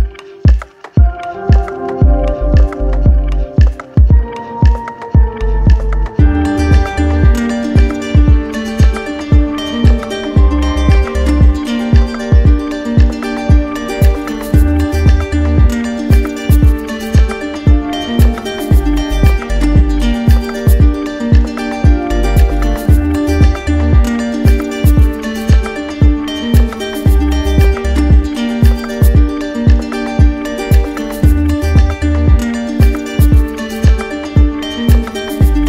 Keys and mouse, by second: 7.6-8.7 drag, 11.9-13.0 drag, 13.0-14.1 drag, 14.7-15.8 drag, 16.9-18.0 drag, 18.4-19.5 drag.